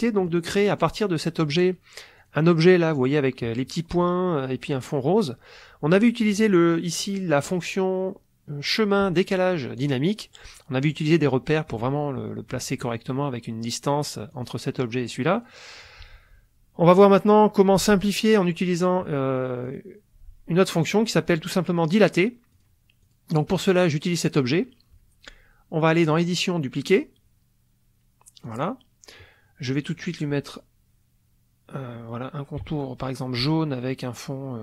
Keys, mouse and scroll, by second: 0.2 click, 0.7 click, 2.2 click, 6.3 click, 10.9 click, 14.3 click, 15.4 click, 17.1 click, 19.7 click, 22.5 click, 23.0 click, 26.1 click, 28.5 click, 32.7 shift+click.